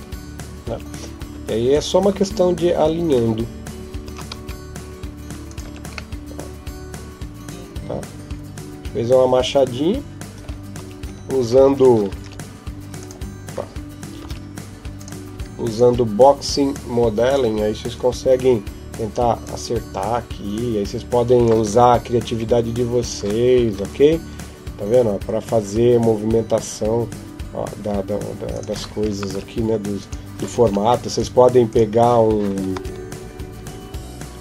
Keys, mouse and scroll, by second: 0.5 Tab, 1.2 Tab, 1.5 right click, 1.9 Tab, 3.8 s, 5.5 Tab, 5.9 middle click, 10.6 Tab, 12.9 click, 14.1 ctrl+Tab, 15.5 alt+right click, 16.6 click, 18.0 KP_7, 19.2 click, 22.1 s, 23.6 g, 29.1 ctrl+Tab, 30.4 ctrl+Tab, 31.5 right click, 32.6 g.